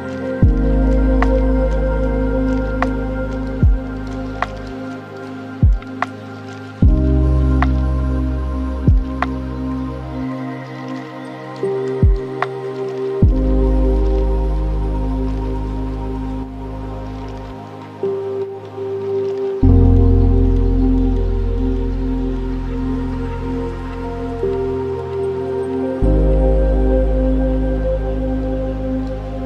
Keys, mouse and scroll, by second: 0.0-1.3 middle drag, 1.3-2.6 scroll up 5, 2.6-3.7 drag, 3.7-4.9 middle drag, 4.9 click, 5.3 shift+d, 6.9 click, 7.9 click, 8.7-9.6 middle drag, 10.6-14.8 drag, 15.1 click, 15.5 shift+d, 18.0-21.9 drag, 22.9-23.3 scroll down 5, 23.3-24.4 middle drag, 24.4 shift+a, 27.7 drag.